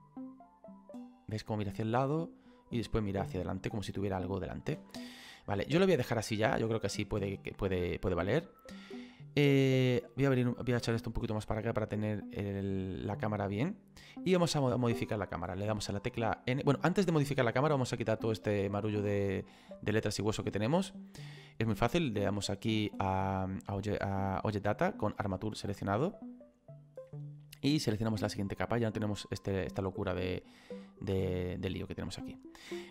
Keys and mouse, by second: 4.8 space, 5.3 click, 9.9 click, 26.3 click, 27.9 click, 29.9 click.